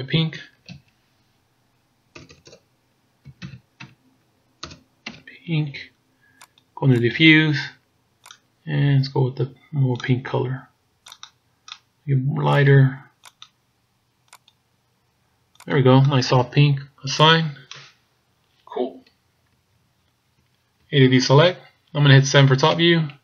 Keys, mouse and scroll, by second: 2.3 BackSpace, 2.5 BackSpace, 7.0 click, 17.3 click, 18.0-18.7 scroll up 1, 18.8-19.7 scroll up 4, 19.7 shift+scroll up 1, 20.8 a, 22.7 KP_7.